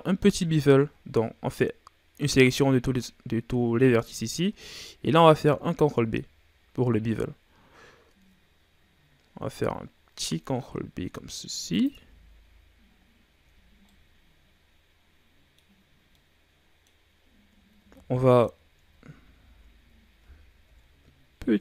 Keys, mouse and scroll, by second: 5.5 ctrl+b, 12.0 Tab, 12.3 scroll up 3, 12.4-13.3 scroll down 3, 13.3 a, 13.5-13.9 scroll down 4, 13.9-17.1 middle drag, 17.1-17.7 scroll up 5, 17.7 ctrl+z, 18.1 middle click, 18.5-18.9 scroll up 3, 18.9 ctrl+z, 19.3 ctrl+z, 19.9-20.3 scroll down 1, 20.6 ctrl+b.